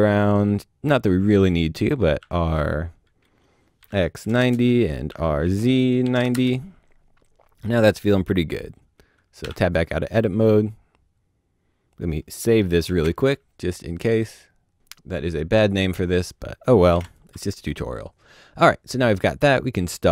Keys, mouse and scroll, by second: 2.2 r, 3.8-6.1 typing, 4.5 KP_Enter, 6.3 KP_Enter, 9.5 KP_Enter, 9.5 Tab, 11.9 Tab, 12.1 ctrl+shift+s, 13.2 click, 13.8-14.4 typing, 14.5 Return, 15.8 click, 17.1 click.